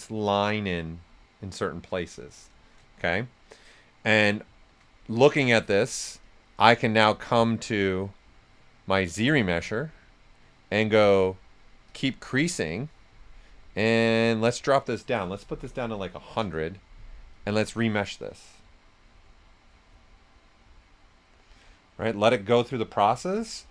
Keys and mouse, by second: 2.2 right click, 4.5 shift+f, 5.1 right click, 5.2 right click, 6.2 shift+click, 7.3 click, 11.8 click, 14.4 click, 15.5 1, 16.2 Return, 17.3 click.